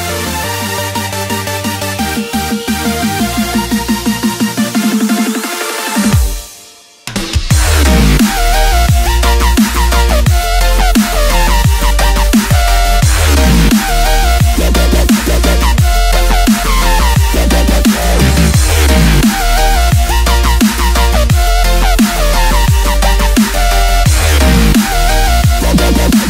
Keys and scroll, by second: 1.7 g, 2.9 v, 15.8-16.6 space.